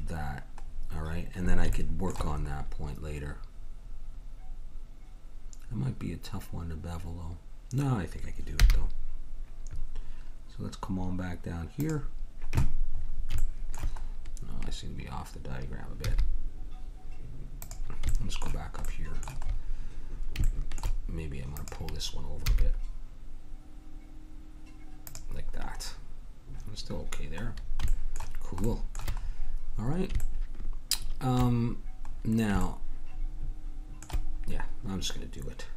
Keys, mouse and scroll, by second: 8.5 g, 14.0 middle click, 14.6-17.1 middle drag, 16.0 g, 18.1-19.1 middle drag, 20.7 click, 21.5 click, 22.4 g, 27.6 middle click, 29.2 middle click, 30.4 middle click, 31.0 middle click, 32.1-35.3 middle drag.